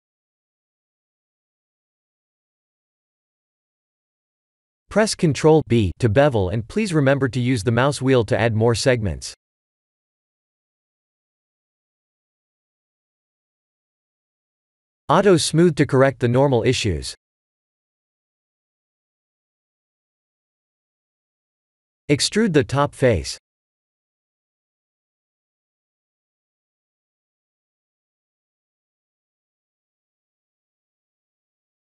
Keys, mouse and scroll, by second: 0.9 shift+click, 1.5 middle click, 2.2 KP_7, 2.9-3.5 scroll down 3, 3.3 middle click, 5.2 ctrl+b, 9.6 Tab, 10.2 middle click, 11.4 click, 11.7 right click, 12.6 middle click, 14.2 click, 14.5 click, 15.6 click, 16.2 click, 16.6 click, 17.1 click, 17.7 s, 20.4 Tab, 21.1 3, 21.3 click, 22.5 e, 26.3 middle click, 28.3 KP_1, 29.9 shift+middle click.